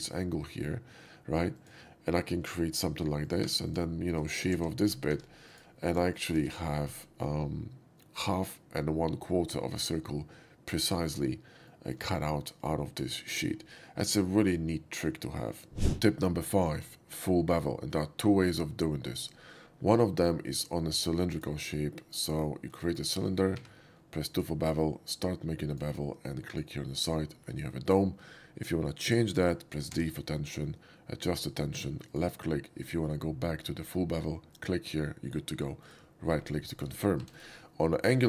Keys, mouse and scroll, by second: 1.4 click, 3.1 click, 3.5 3, 3.7 click, 4.6 shift+x, 4.8 shift+middle drag, 5.1 2, 5.2 shift+x, 5.5 click, 6.1 click, 6.5 x, 6.7 middle click, 9.6 middle click, 11.7 shift+middle drag, 19.1 click, 20.5 click, 21.3 click, 22.1 click, 22.3 right click, 22.9 shift+middle drag, 23.6 2, 24.3 click, 24.8-25.7 drag, 26.5 click, 30.0 d, 32.1 click, 34.4 click, 35.7 right click, 36.4 middle click, 36.8 shift+middle click, 37.2 x, 37.3 click.